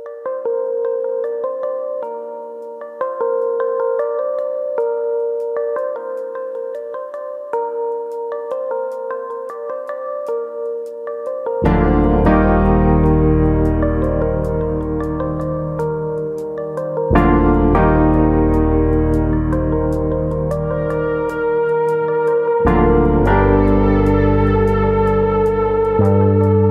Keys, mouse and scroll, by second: 0.3 KP_3, 2.1 click, 4.9 scroll down 4, 5.1 middle click, 5.5-6.2 scroll up 1, 6.2-7.4 scroll up 1, 6.2 KP_3, 7.4 click, 8.3 ctrl+z, 8.4-9.0 scroll up 4, 9.0 shift+middle click, 9.8 click, 10.7 scroll down 3, 11.0 middle click, 11.5 scroll down 2, 11.8 middle click, 12.3 middle click, 12.3-12.8 scroll up 1, 12.8 click, 13.4 scroll down 2, 13.7 middle click, 14.3 scroll down 2, 14.5 middle click, 15.1 KP_1, 15.7-16.2 scroll up 2, 17.1 click, 18.0-19.4 scroll up 2, 18.3 shift+middle click, 19.4 click, 20.7 click, 21.9 click, 22.7 click, 23.1-24.2 scroll down 4, 23.7 middle click, 24.2 middle click, 25.0 middle click, 25.4 middle click, 25.7 shift+click, 26.1 middle click, 26.4-26.7 scroll down 3.